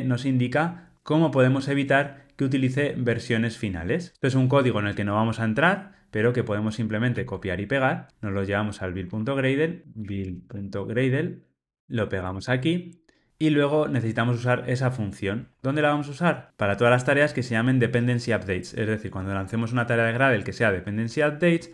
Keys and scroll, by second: 12.4 super+v.